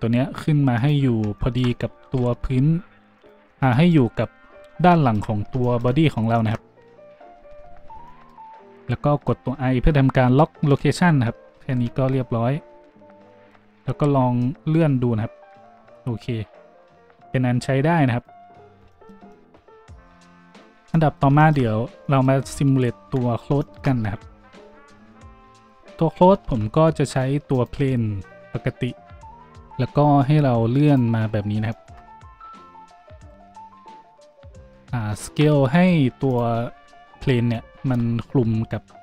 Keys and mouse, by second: 0.9-14.4 middle drag, 0.9 `, 0.9 g, 2.0 g, 11.6 i, 14.4-29.2 drag, 14.4 a, 20.5 middle click, 20.5 right click, 23.5 shift+`, 25.3 a, 25.3 z, 26.4 shift+a, 29.2-33.2 middle drag, 31.5 shift+g, 32.9 Tab, 33.2 click, 33.4-39.0 middle drag, 34.7 Tab, 35.6 s, 37.9 Tab.